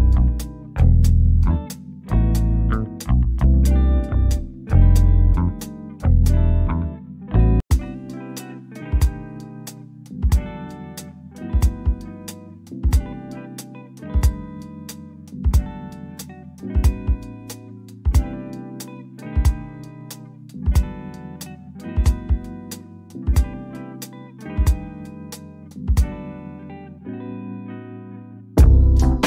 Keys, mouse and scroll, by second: 0.6 click, 7.3 1, 8.0 Return, 9.6 shift+click, 12.1 middle click, 12.8-13.3 scroll up 1, 13.4 middle click, 13.6 middle click, 13.8-14.2 scroll up 1, 14.2-16.4 middle drag, 16.4-18.4 drag, 18.4 1, 19.2 Return, 20.3-25.9 drag, 25.9 1, 27.0 Return, 28.5 shift+click.